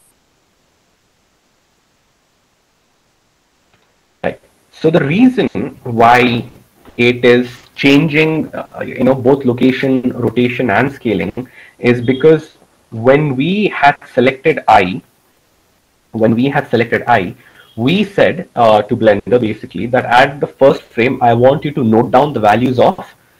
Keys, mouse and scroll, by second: 17.3 i.